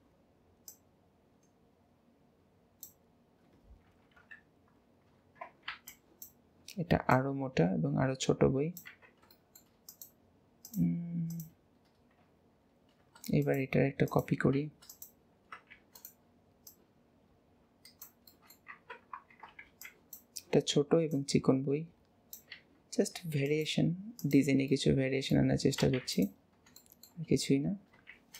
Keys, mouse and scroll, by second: 0.7 click, 4.2 KP_1, 5.2 alt+a, 7.1 click, 9.3-9.9 shift+middle drag, 9.9 click, 10.6 click, 11.3 click, 13.4 click, 14.1 click, 14.9 click, 15.7 shift+d, 16.7 click, 18.3 shift+middle click, 18.7 Tab, 19.3 alt+a, 21.1 click, 23.4 click, 24.2 click, 24.7-25.8 middle drag, 25.8 alt+z, 26.2 drag, 26.8-27.6 shift+middle drag, 27.6-27.9 scroll down 2, 28.1 shift+d.